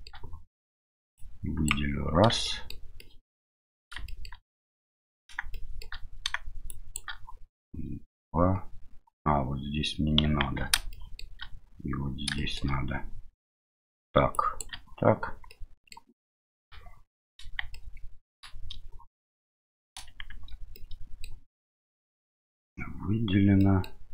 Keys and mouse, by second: 1.1 click, 2.4 shift+middle click, 3.0 shift+middle click, 4.1 shift+middle click, 5.5 shift+middle click, 6.7 shift+click, 10.4 ctrl+z, 10.9 middle click, 12.3 shift+middle click, 14.4 shift+click, 15.5 middle click, 16.5 KP_7, 17.7 middle click, 20.3 shift+z, 20.7 middle click, 23.6 middle click.